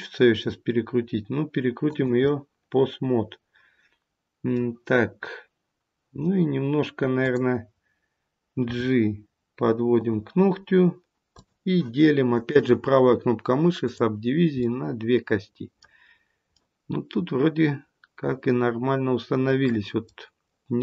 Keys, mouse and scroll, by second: 0.3 r, 2.2 middle click, 7.1 click, 8.6 g, 11.3 click, 12.2 right click, 14.6 middle click, 16.0-16.5 scroll down 1, 16.5 middle click, 20.0 middle click.